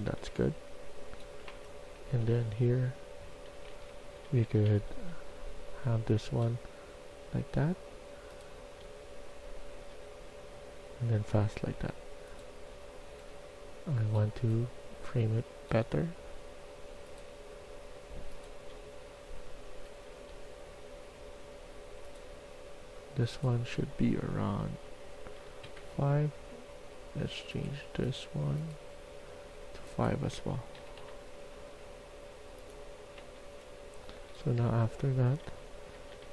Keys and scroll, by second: 0.0-2.1 typing, 3.3-4.6 typing, 5.6 d, 8.7-9.6 d, 13.0 s, 18.6-19.6 d, 20.0 d, 25.3 5, 25.6 Return, 30.7 5, 30.9 Return, 33.2-36.3 typing.